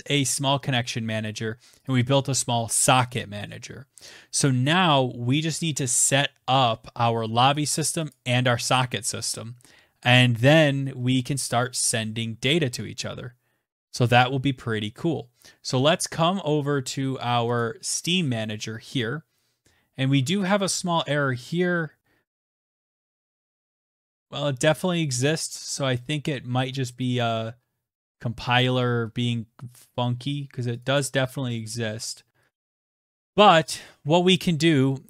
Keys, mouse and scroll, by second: 0.2 click, 1.3 click, 6.9 scroll, 7.5 click, 17.0 click, 18.9 scroll down 4, 19.7 scroll, 23.0 click, 23.1 click, 26.4 click, 28.0 scroll down 2, 28.4-28.9 scroll up 3, 29.9 scroll, 30.2 click, 30.3 click, 31.8 click, 32.9-33.9 scroll.